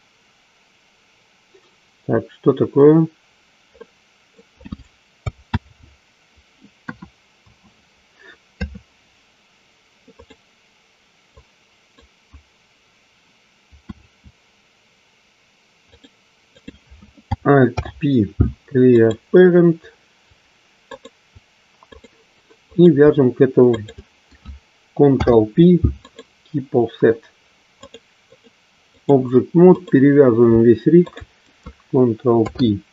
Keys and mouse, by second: 3.8 middle click, 5.4 ctrl+z, 6.8 KP_1, 7.4 KP_2, 8.4 KP_3, 10.0 click, 11.3 click, 13.8 e, 16.4 click, 17.6 alt+p, 21.0 shift+click, 21.9 click, 22.6 click, 23.6 shift+click, 25.2 ctrl+p, 28.3 click, 32.4 ctrl+p.